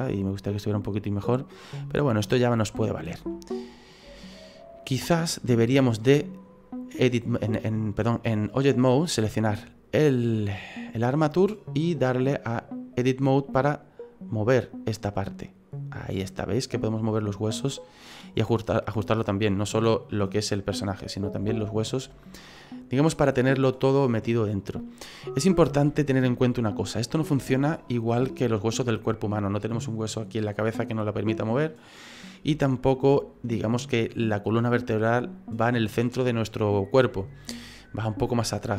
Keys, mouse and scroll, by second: 0.5 middle click, 0.6-1.0 scroll down 2, 1.0 middle click, 3.3 shift+middle click, 5.1 right click, 8.0 click, 9.6 right click, 11.9 click, 13.7 right click, 14.4 right click, 15.3 click, 18.3-19.1 scroll down 3, 18.8 middle click, 20.8 click, 21.5 shift+middle click, 22.1 middle click, 23.7 middle click, 25.6 shift+middle click, 26.0 shift+middle click, 32.6 shift+middle click, 34.9 middle click, 36.1 middle click.